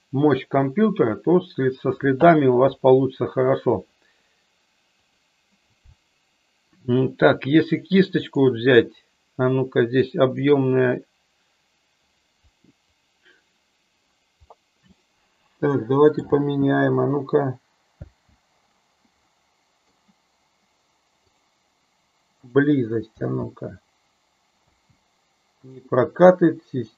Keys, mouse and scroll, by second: 10.2-13.2 drag, 14.6-16.3 middle drag, 16.3 space, 18.1 space, 19.4-20.0 middle drag, 21.4-22.6 drag, 23.1 space, 24.7 space, 25.6-26.9 drag.